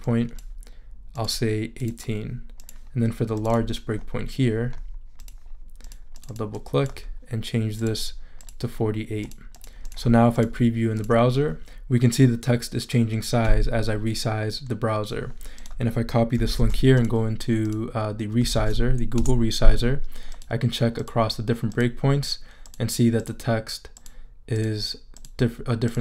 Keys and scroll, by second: 16.6 super+c, 18.5 super+v, 19.2 super+Return, 19.8 Return.